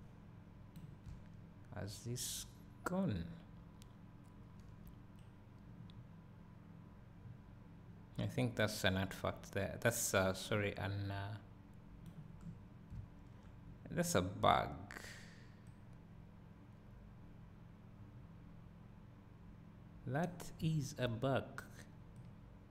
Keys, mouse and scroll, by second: 1.1 `, 4.9 right click, 9.9 right click, 12.3-12.8 right drag, 12.5 scroll down 1, 13.0 `, 13.3-14.5 right drag, 13.9 scroll up 1, 15.7-22.7 right drag, 20.7 `.